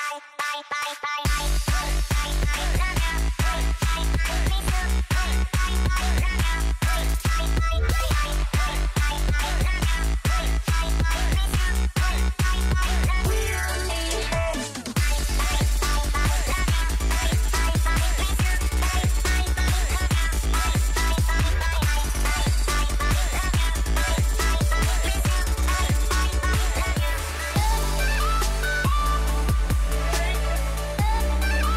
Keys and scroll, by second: 4.0 space, 6.1 space, 10.1 space, 19.7 space, 21.5 space, 23.6 space, 26.8 Delete.